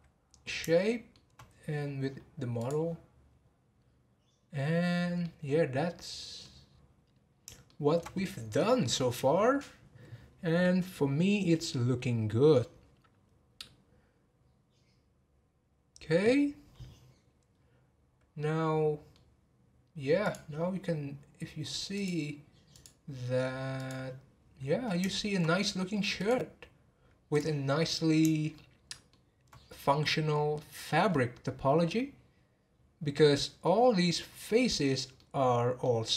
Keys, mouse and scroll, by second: 0.8-1.8 shift+middle drag, 1.8 scroll down 4, 2.7-5.2 drag, 5.2-6.7 middle drag, 6.7 scroll down 1, 7.6-10.7 shift+middle drag, 17.5-17.9 scroll up 4, 18.3 scroll up 1, 18.4-20.2 middle drag, 20.2 click, 22.0 click, 22.7-24.7 drag, 24.7-25.1 scroll down 1, 25.1-26.1 shift+middle drag, 26.1 click, 27.3 click, 28.5-31.1 shift+middle drag, 31.1-31.8 scroll up 4, 31.8-32.3 scroll up 3, 32.8-33.2 scroll down 1, 33.2-36.1 middle drag.